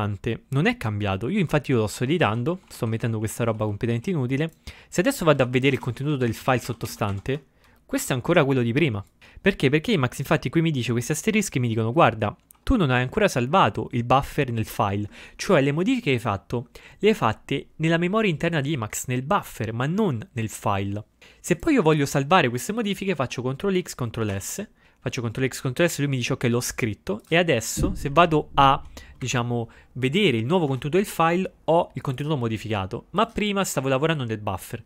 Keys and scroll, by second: 1.6-7.7 typing, 24.3 ctrl+x, 24.5 ctrl+s, 29.4 Up.